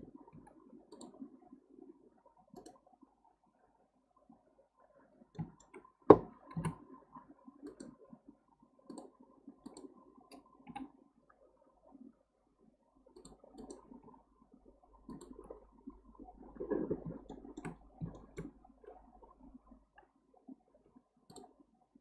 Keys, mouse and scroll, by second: 0.3 k, 5.0-5.3 scroll up 1, 5.3-6.6 middle drag, 6.6 KP_7, 7.7 click, 8.1 x, 9.7 click, 10.7 g, 13.6 click, 14.0 g, 15.5-17.2 scroll down 1, 17.2 scroll down 3, 17.3 shift+middle click, 17.8-18.1 scroll up 1, 18.1-20.8 shift+middle drag, 20.8 k.